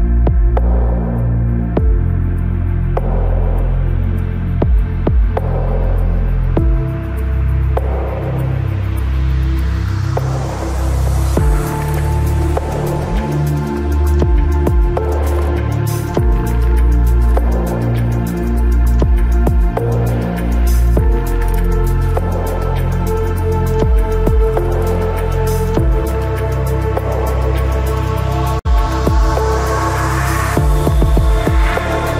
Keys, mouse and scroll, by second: 1.1 right click, 2.2 c, 7.1-9.6 middle drag, 11.2 z, 11.8 z, 14.8 z, 17.0 z, 17.9 KP_3, 18.7 c, 24.8 right click, 25.8-27.2 middle drag, 25.8 right click, 25.9 click, 28.1 z, 28.7 z, 31.2 c.